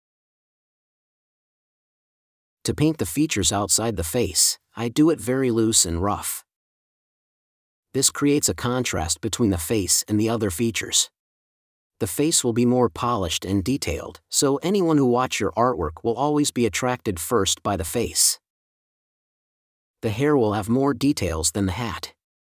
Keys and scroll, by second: 5.2 super+s, 6.2 End, 11.1 4.